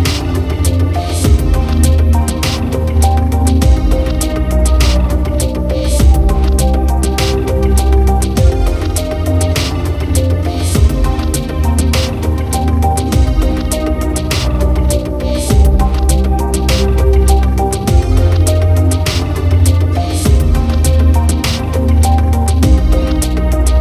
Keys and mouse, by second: 0.2 right click, 0.9 right click, 2.1 right click, 2.7 right click, 3.0 right click, 4.6 right click, 6.7 right click, 7.0 right click, 7.3 right click, 8.3 right click, 8.7 right click, 9.6 right click, 9.8 right click, 11.4 right click, 12.4 right click, 13.8 right click, 14.1 right click, 14.7 right click, 15.2 right click, 15.6 right click, 15.9 right click, 16.8 right click, 18.8 right click, 19.1 right click, 19.3 right click, 19.7 right click, 22.3 right click, 23.4 right click.